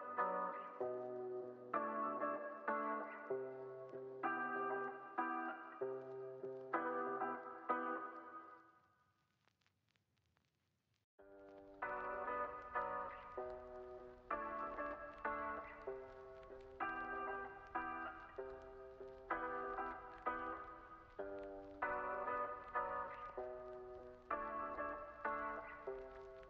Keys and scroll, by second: 13.2 o, 14.1 z, 16.0 0, 17.2 x, 18.6 z, 19.9 x, 21.2 z, 21.8 x, 22.5 z, 23.3 x, 24.9 space.